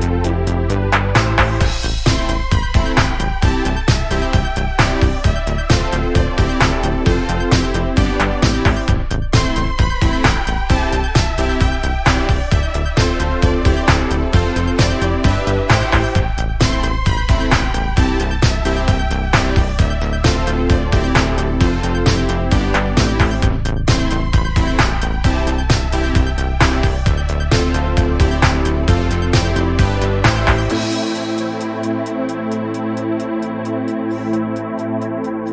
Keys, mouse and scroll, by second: 3.4 drag, 3.7 scroll down 1, 3.8-6.4 middle drag, 6.4 KP_1, 8.0 scroll down 4, 9.0 scroll up 5, 9.6 shift+middle drag, 9.9 scroll up 1, 10.6 click, 11.1 Tab, 11.9 click, 12.7 alt+z, 12.9 click, 14.7 1, 14.9 click, 15.3 click, 16.3-17.9 scroll up 2, 17.9-18.5 scroll up 1, 19.4 g, 23.5 click, 24.5 Tab, 24.9-25.9 scroll down 3, 25.9 alt+z, 26.2 scroll up 5, 26.6 click, 26.9 scroll down 4, 27.1-28.0 middle drag, 28.0 click, 28.5-29.0 scroll down 2, 29.0 KP_1, 29.7 shift+middle click, 29.9-30.9 shift+scroll up 2, 30.9 Tab, 31.3 scroll up 3, 31.7 z, 32.5 alt+z, 33.3-33.7 scroll down 6, 33.7 click, 34.1-35.4 shift+middle drag, 35.4 click.